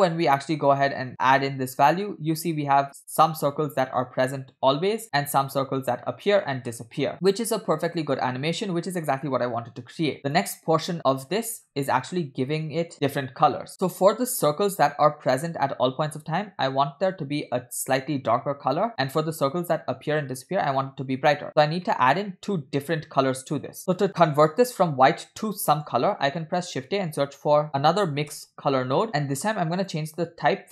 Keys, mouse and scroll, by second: 1.0-3.2 drag, 5.1-10.5 shift+drag, 11.1-11.9 scroll down 6, 12.2 middle click, 13.6 middle click, 13.7 click, 13.7 scroll up 4, 14.4 click, 17.0-17.6 scroll up 4, 19.3-19.7 scroll down 2, 21.8 scroll down 3, 21.9 middle click, 23.7 middle click, 23.9 scroll up 3, 25.5 scroll up 2, 25.7 middle click, 26.1 shift+a, 29.4 scroll up 2, 29.8-30.7 drag.